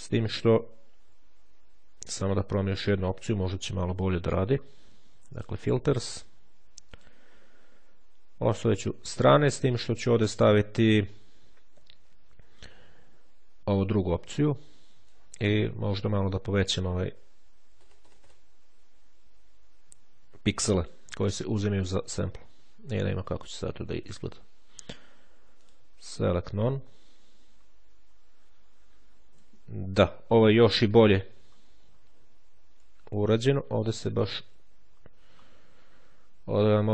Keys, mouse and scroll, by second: 1.5-2.2 ctrl+scroll up 1, 2.2-2.8 ctrl+scroll down 2, 3.2-3.7 ctrl+shift+scroll up 1, 5.2 click, 6.8 click, 9.4 click, 13.6 click, 14.8-16.0 drag, 16.5 click, 17.7 KP_1, 17.9 KP_0, 20.7 click, 25.4 click, 28.0-28.6 shift+scroll up 2, 30.1-30.7 shift+scroll down 3, 30.7-31.2 scroll up 2, 32.4-33.0 scroll down 2, 33.6-35.4 ctrl+shift+scroll up 3, 35.4-36.2 shift+scroll down 2, 36.5-36.9 shift+scroll down 2.